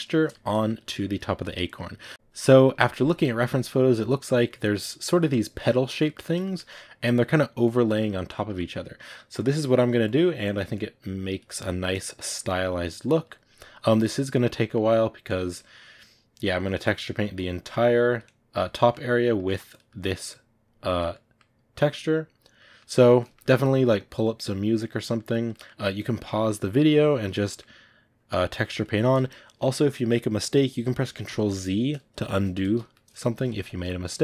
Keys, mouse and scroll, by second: 2.0 click, 2.1-3.5 shift+middle drag, 3.5-5.1 drag, 5.1 middle click, 5.9 click, 6.1 shift+middle click, 6.8-7.8 drag, 7.8 middle click, 8.2 click, 8.3 middle click, 9.2 click, 9.9 middle click, 10.3-11.5 drag, 11.5 middle click, 12.1 click, 12.3 middle click, 12.9-14.5 drag, 14.5 middle click, 15.1-16.4 drag, 16.4 middle click, 17.2-18.6 drag, 18.6 middle click, 19.6 click, 19.8 middle click, 20.2 click, 21.0 middle click, 21.6 click, 22.5-23.8 middle drag, 23.8-25.0 drag, 25.0 middle click, 25.9-27.3 drag, 27.3 middle click, 28.0-29.8 drag, 29.8-31.2 middle drag, 31.2 ctrl+z, 32.6 ctrl+z, 32.8 middle click, 33.4 ctrl+z, 33.9 click.